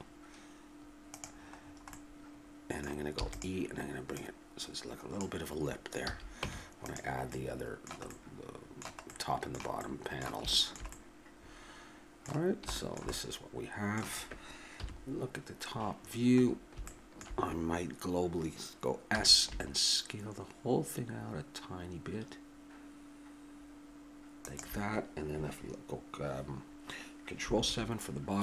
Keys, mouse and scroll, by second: 3.1 e, 4.1-5.8 drag, 5.8-7.3 middle drag, 6.0 a, 6.4 Tab, 14.8 KP_7, 19.1 s, 22.1 click.